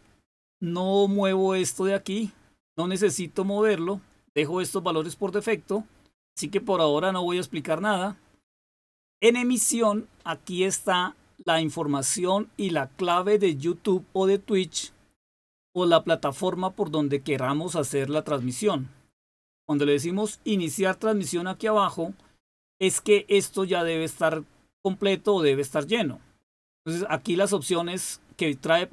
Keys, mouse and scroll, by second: 9.0 click, 25.7 click.